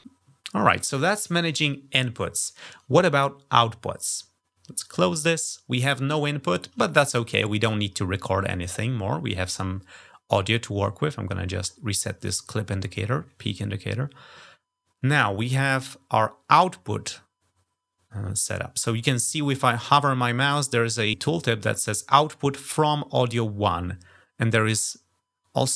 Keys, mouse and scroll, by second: 5.1 click, 11.4 click.